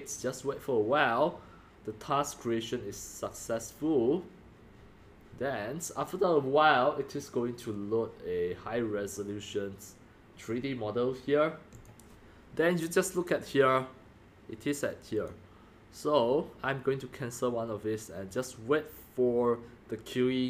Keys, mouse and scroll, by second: 3.6 click, 9.8-10.2 drag, 11.7 click, 14.4-14.9 drag, 15.1 click.